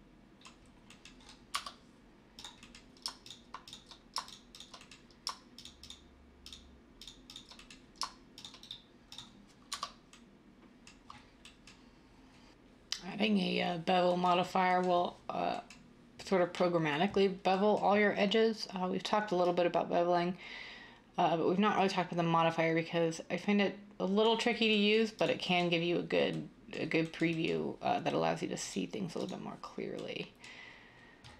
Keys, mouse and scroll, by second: 0.8 Tab.